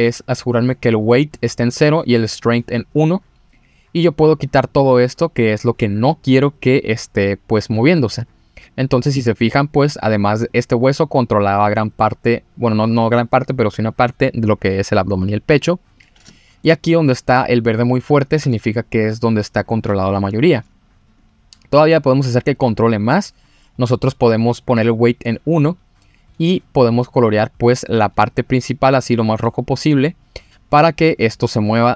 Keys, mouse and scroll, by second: 3.5 click, 11.1-12.2 drag, 16.3 shift+middle click, 17.8-19.3 scroll up 2, 21.2 click, 22.7 click, 25.6 click.